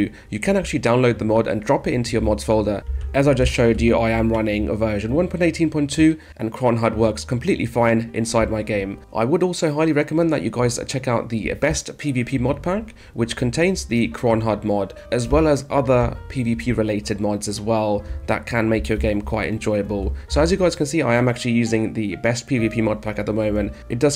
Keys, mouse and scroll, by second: 2.7 a, 6.3 w, 8.1 space, 9.7 d, 11.5 d, 13.1 d, 13.7 a, 15.1 space, 15.8 a, 17.9 space, 18.8 d.